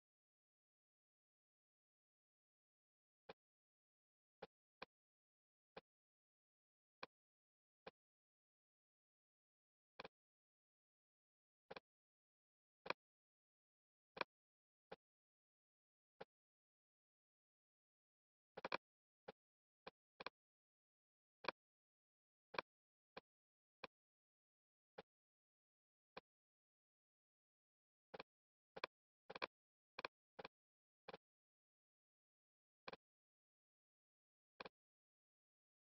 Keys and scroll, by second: 27.1 Return.